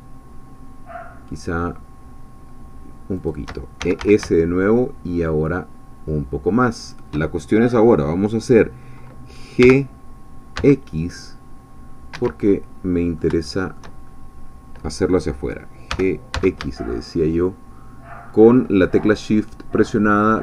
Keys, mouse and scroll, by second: 3.2 shift+click, 3.6-4.5 typing, 6.8 shift+click, 9.6 g, 10.6 x, 12.2 Escape, 12.5 click, 13.4 shift+click, 14.0 shift+scroll up 2, 15.9 g, 16.3 x.